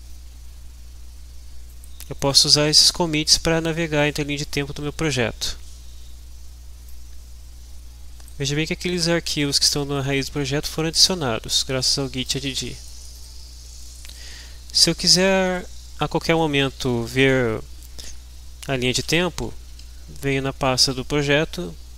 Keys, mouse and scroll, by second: 1.7 click, 7.0-8.5 drag, 9.2 click, 12.3 click, 13.2 click, 18.6-19.5 typing.